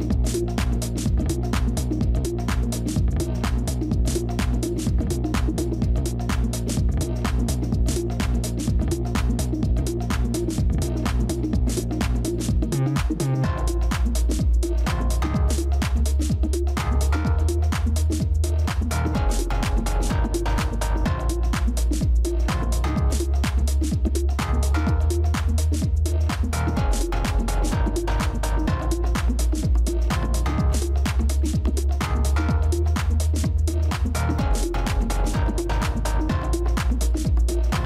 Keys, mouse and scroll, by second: 0.0-5.9 typing, 1.9 Return, 8.8 ctrl++, 12.4 double click, 13.1 typing, 13.5 Return, 22.6 double click, 36.5-37.5 typing.